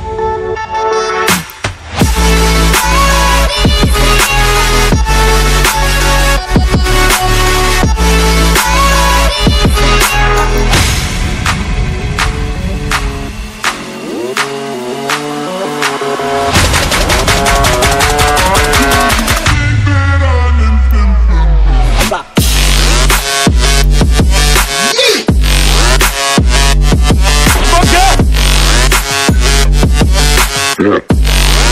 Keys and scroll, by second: 28.6 [, 29.1 [, 30.3 [.